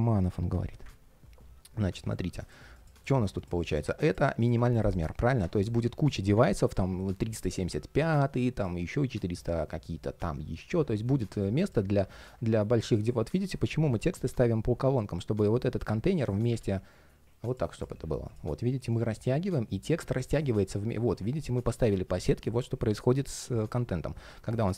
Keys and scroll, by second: 11.6 super+z, 16.3 super+z.